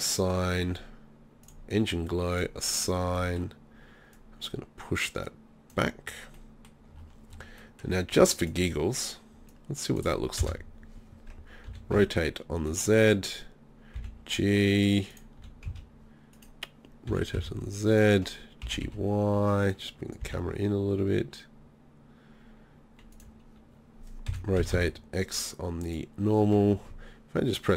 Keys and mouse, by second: 1.8-6.4 middle drag, 8.1 Tab, 10.4 KP_0, 11.7 r, 12.8-13.6 drag, 13.9 g, 15.4 e, 15.6 z, 16.3-17.3 drag, 17.1 r, 18.6 g, 20.2 g, 24.2 r, 25.9-27.7 drag.